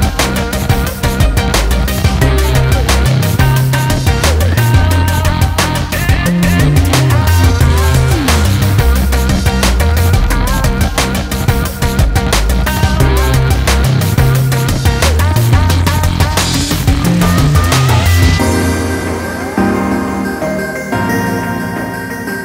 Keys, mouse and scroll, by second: 3.4 click, 6.9 click, 14.6 click, 18.1 scroll down 1, 18.2 alt+a, 18.4-18.9 scroll up 2, 18.9 scroll down 1, 20.6 click.